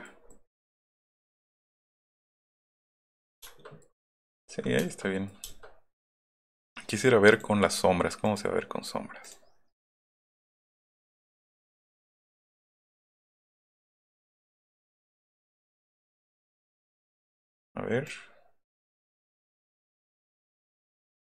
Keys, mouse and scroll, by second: 0.3-3.0 middle drag, 3.0-3.4 scroll down 1, 3.4 shift+middle click, 3.8 middle click, 4.3-4.8 middle drag, 7.3 click, 8.3 click, 9.3 click, 9.9 click, 10.5 click, 10.9 click, 11.6 click, 12.2 middle click, 13.3-16.0 drag, 16.7-17.5 drag, 18.1-20.6 drag, 20.8 scroll up 1.